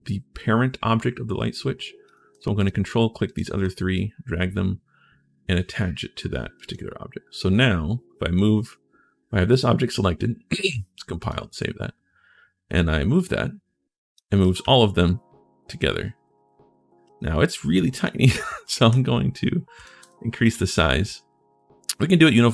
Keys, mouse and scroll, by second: 1.8 click, 2.3 ctrl+click, 3.0 ctrl+click, 3.7-5.8 drag, 9.3 click, 10.4 click, 10.7 3, 11.0 click, 12.5-13.9 right drag, 13.7 scroll down 1, 14.2-17.0 right drag, 14.4 w, 17.8 d, 18.6 s, 19.6 right click, 19.8 r.